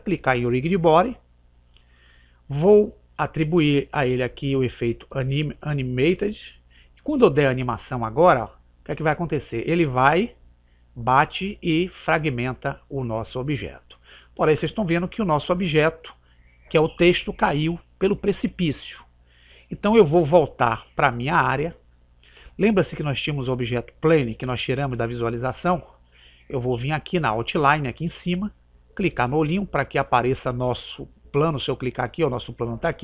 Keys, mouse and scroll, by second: 0.5 click, 6.1 click, 8.5 click, 12.3 click, 29.6 click, 31.7-33.0 right drag.